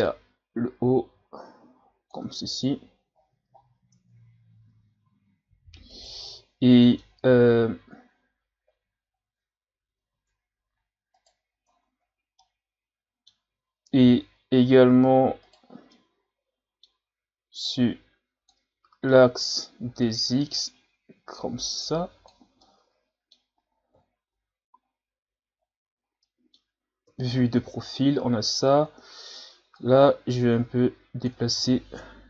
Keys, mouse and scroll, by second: 0.1-2.3 drag, 2.3 Tab, 2.7 a, 3.2 scroll down 2, 3.6 ctrl+scroll up 4, 4.0 Tab, 4.7 Tab, 5.1 a, 5.9 right click, 6.3-7.7 middle drag, 7.7 KP_3, 9.1-9.4 scroll up 2, 9.4 Tab, 10.0 Tab, 11.2 right click, 11.7 Tab, 12.4-14.0 middle drag, 14.0 KP_1, 15.4 right click, 15.8 scroll down 1, 15.9-17.7 middle drag, 17.7-18.7 drag, 18.7 ctrl+z, 19.1 middle click, 20.0 click, 22.6-23.9 middle drag, 23.9 KP_1, 24.3 Tab, 24.7 a, 25.0-25.7 scroll down 1, 25.7-26.2 scroll up 2, 26.2-27.1 middle drag, 27.1 KP_3, 27.9-28.5 scroll up 4, 28.5 Tab, 29.7-31.5 drag, 31.5 ctrl+z.